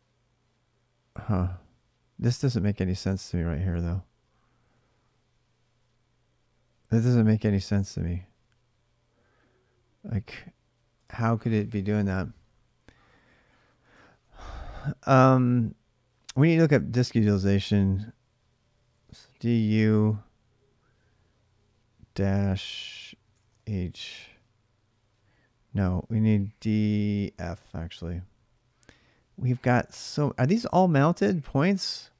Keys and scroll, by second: 12.1-13.6 typing, 18.5-19.5 typing, 22.7-23.3 typing, 23.5 Return, 26.1-27.1 typing, 27.3 Return, 29.8-30.7 typing.